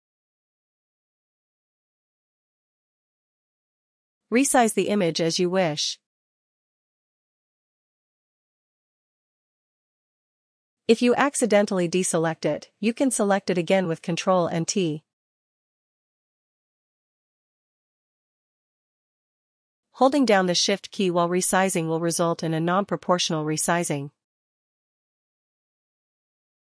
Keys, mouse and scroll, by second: 0.9 ctrl+t, 4.9 click, 8.7 click, 13.0 click, 13.7 click, 15.7 ctrl+t, 20.5 click, 23.7 click, 25.0 click.